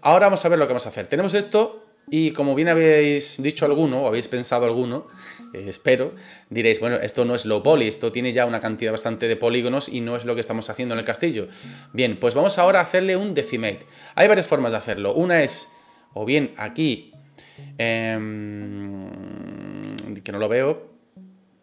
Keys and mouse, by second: 1.2-2.9 middle drag, 15.9 click, 17.0-21.6 drag.